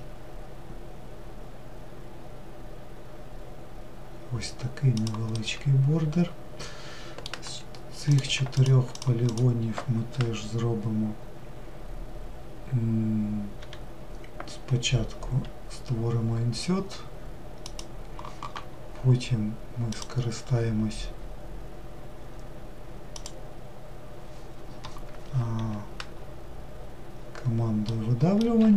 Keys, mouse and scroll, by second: 5.8-7.8 middle drag, 7.8 click, 8.3 shift+click, 8.7 shift+click, 9.0 shift+click.